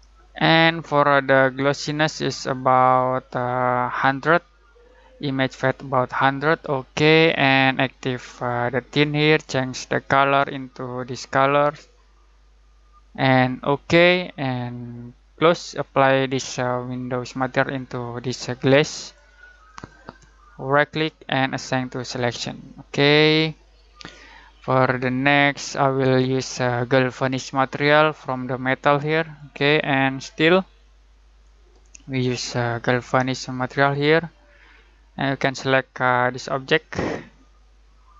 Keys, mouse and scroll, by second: 7.9-13.6 drag, 18.1 click, 20.7 right click, 21.9 click.